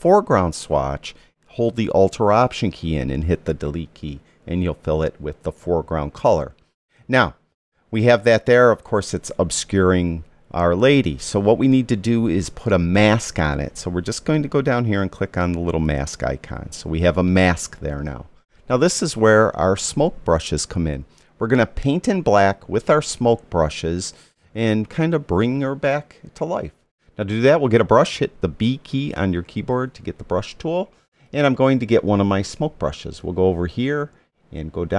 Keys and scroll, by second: 28.7 b.